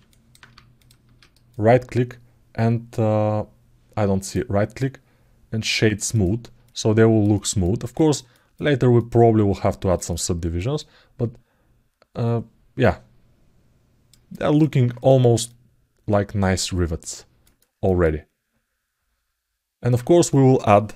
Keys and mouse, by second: 0.6 shift+click, 2.1-6.0 right drag, 6.4 alt+middle click, 9.0 alt+middle click, 11.1-12.1 alt+middle drag, 12.9 alt+middle click, 14.1 ctrl+alt+middle click, 15.2 alt+middle click, 16.0-17.0 alt+middle drag, 18.2 alt+middle click, 19.1 alt+middle click.